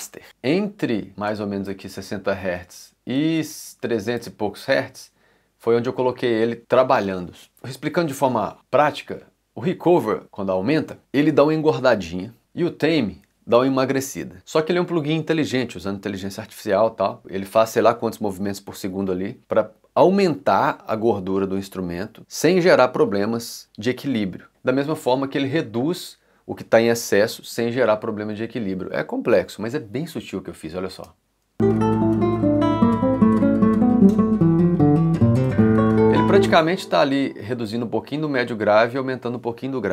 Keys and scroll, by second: 31.0 space, 35.9 space.